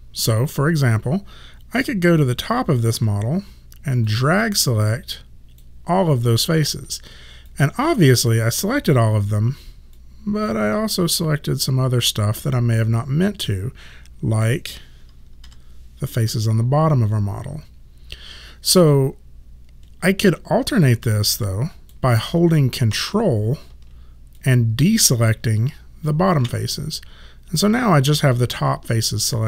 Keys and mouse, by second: 0.8 alt+click, 4.1 click, 7.5 alt+click, 10.0 click, 15.5 4, 19.0 click, 24.4 ctrl+click.